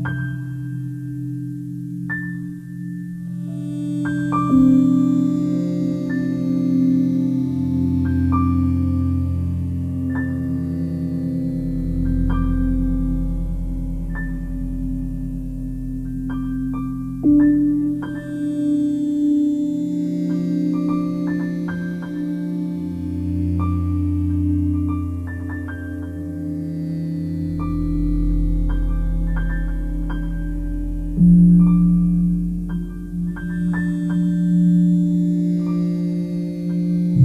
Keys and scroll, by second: 16.9 ctrl+e, 20.3 ctrl+j.